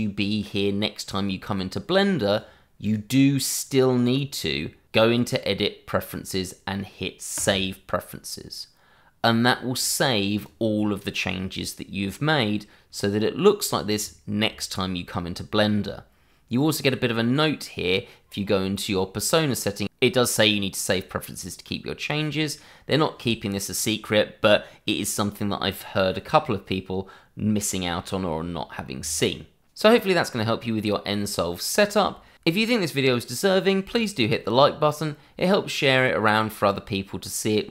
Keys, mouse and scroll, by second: 2.3 click, 7.3 click, 10.3 click, 16.6 click.